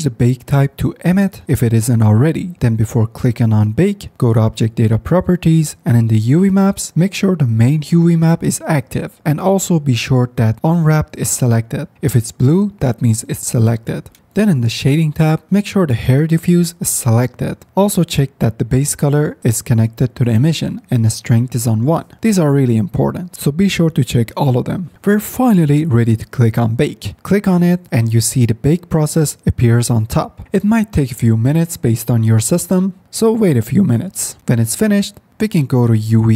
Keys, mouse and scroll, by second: 3.3 F9, 33.4 F10.